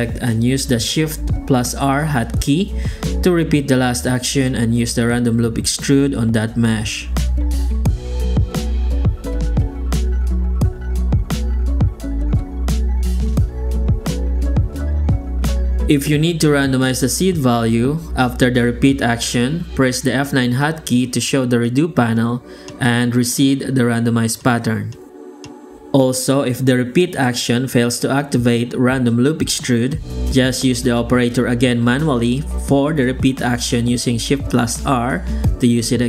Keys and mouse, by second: 1.7 shift+r, 2.1-2.8 drag, 3.2 click, 4.6 click, 5.3 shift+r, 6.3 click, 7.4 shift+r, 8.4 click, 9.3 shift+r, 9.7 click, 10.1 shift+r, 11.1 click, 11.5 shift+r, 11.8 click, 12.9 click, 13.3 shift+r, 13.7 click, 14.1 shift+r, 14.6 click, 15.2 shift+r, 15.6 shift+r, 15.8 click, 16.2 shift+r, 16.4 click, 16.7 shift+r, 17.5 click, 18.0 shift+r, 18.7 shift+r, 19.0 click, 19.3 shift+r, 19.6 click, 20.6 shift+r, 21.2 F9, 26.0 right click, 26.5-30.7 typing, 26.7 click, 27.7 click, 28.3 click, 29.2 click, 29.8 click, 30.4 right click, 31.9 shift+r, 33.6 click, 34.1 click, 34.5 alt+a, 34.8 click.